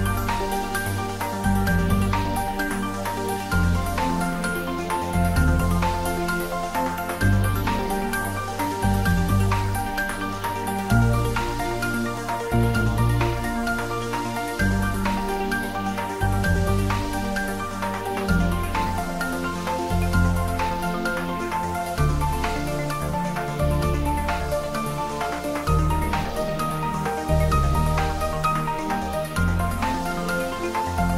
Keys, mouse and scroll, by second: 1.3 g, 5.8 y, 6.7 Right, 9.5 click, 10.3 g, 10.6 z, 11.4 Up, 12.0 click, 12.4 scroll down 1, 13.2 middle click, 14.6 click, 17.1 s, 17.9 click, 18.6 g, 18.9 z, 20.4 click, 20.7-22.0 middle drag, 22.3 click.